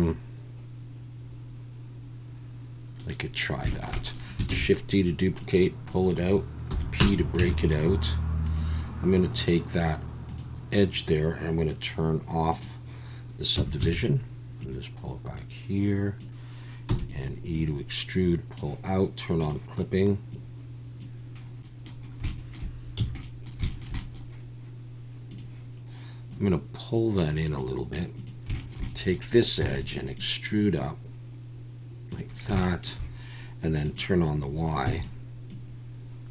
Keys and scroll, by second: 4.5 shift+d, 6.7 p, 7.4 Tab, 13.6 Tab, 13.8 a, 17.0 e, 21.7 ctrl+z, 23.2 a, 29.6 e, 34.9 e.